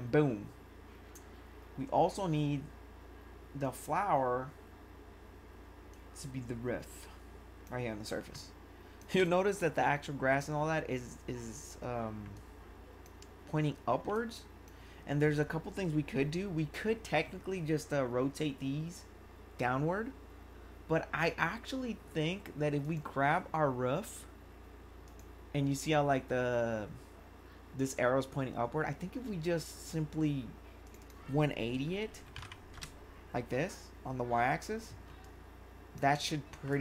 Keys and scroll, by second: 9.2 1, 32.0-32.8 typing, 35.0 1.